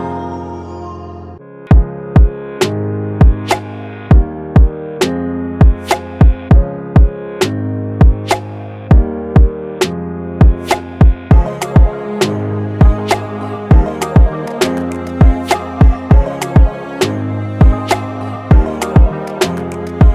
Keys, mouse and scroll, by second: 5.9 ctrl+t, 8.9 Return, 9.5 Down, 9.6 Down.